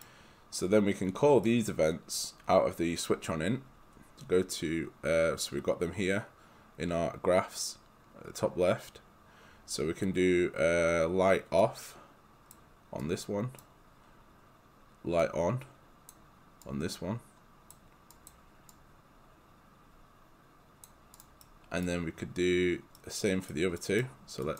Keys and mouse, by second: 11.6 click, 21.5 right click.